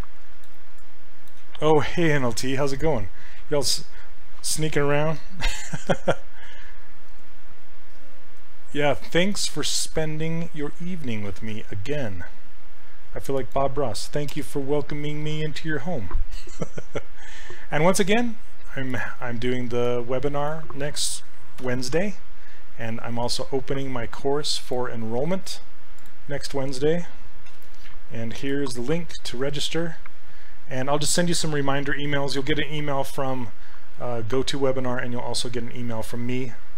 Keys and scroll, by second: 14.3 BackSpace, 21.7 ctrl+c, 27.5 ctrl+v, 28.4 Return.